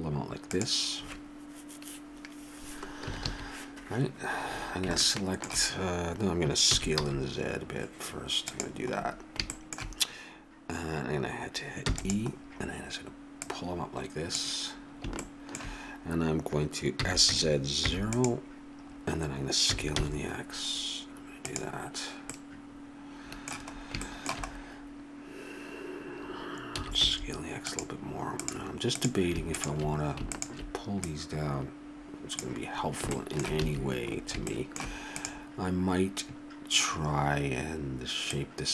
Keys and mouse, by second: 3.1 a, 3.2 a, 5.0-6.5 middle drag, 6.7 s, 11.9 e, 13.1-15.2 drag, 17.0 s, 18.4 click, 19.7 s, 23.8-26.4 middle drag, 26.8 s, 28.4-32.8 drag, 32.8 middle click, 33.6 a, 35.2-36.3 middle drag, 36.3 click.